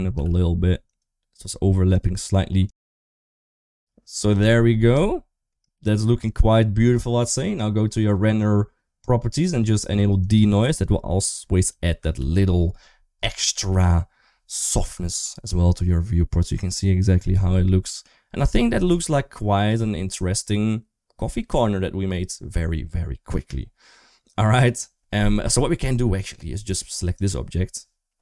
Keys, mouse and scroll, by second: 0.0 g, 3.6 ctrl+s, 4.9 shift+middle click, 7.0 click, 10.0 click, 12.1 ctrl+s, 19.5 click, 27.0 click.